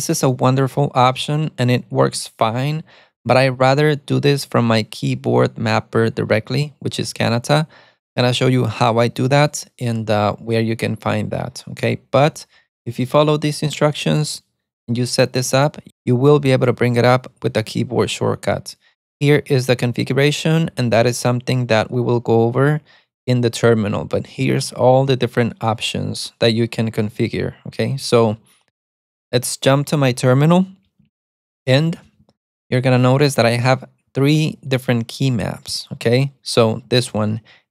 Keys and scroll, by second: 31.1-34.0 typing, 36.8-37.7 typing.